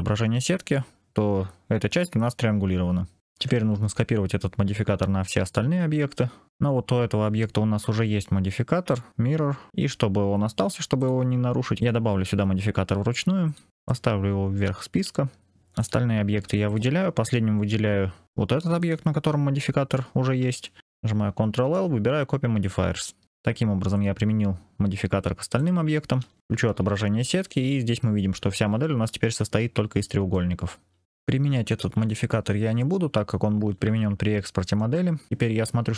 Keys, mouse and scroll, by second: 3.2 ctrl+/, 5.3 click, 10.9 click, 11.7-13.5 drag, 13.7-14.5 drag, 15.7 click, 16.6 shift+click, 18.7 shift+click, 21.4 ctrl+l, 23.2 click, 23.8 click, 25.4 click, 26.7 ctrl+/, 30.2-31.0 middle drag, 31.7 ctrl+/, 32.7-34.8 middle drag, 34.7 c.